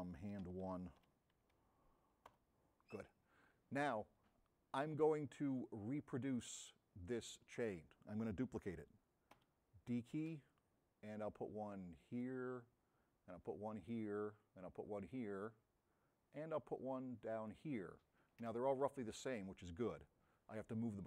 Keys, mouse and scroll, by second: 0.2-1.5 typing, 2.3 Return, 4.2-5.9 middle drag, 6.7 middle click, 12.1 click, 13.7 click, 15.6 middle click.